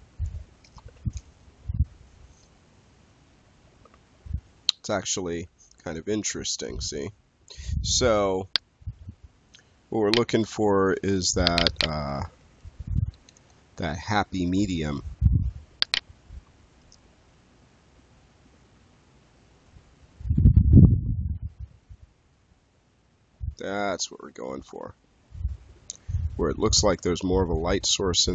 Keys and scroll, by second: 13.2 Return.